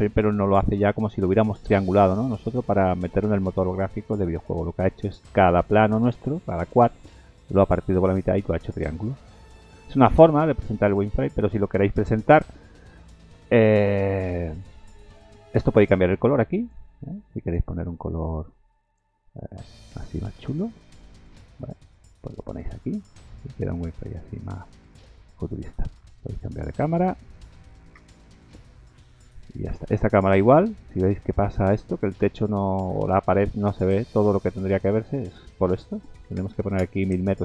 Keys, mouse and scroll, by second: 1.3 middle click, 1.8 shift+middle click, 1.9 shift+middle click, 2.2 middle click, 5.7 middle click, 8.1 scroll down 4, 8.5 middle click, 9.2-9.7 scroll up 3, 9.8 shift+middle click, 10.4 middle click, 11.9 KP_0, 13.8-14.4 scroll down 3, 14.6 shift+middle click, 15.2-15.9 scroll up 3, 16.6 click, 17.4 click, 23.6-24.0 scroll up 4, 24.4 shift+middle click, 24.7-25.2 scroll down 5, 25.2 middle click, 25.5-25.9 scroll down 3, 27.1 click, 27.1 scroll down 1, 28.0 ctrl+KP_0, 29.6 scroll down 1, 31.7 click, 35.2 click, 36.5 KP_0, 36.7 KP_0.